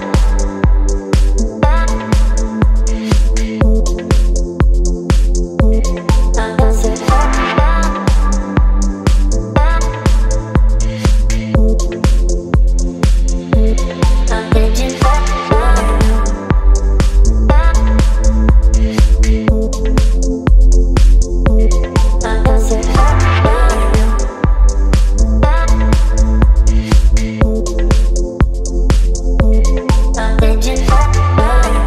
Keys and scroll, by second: 3.1 ctrl+t, 7.2 Return, 8.7 space.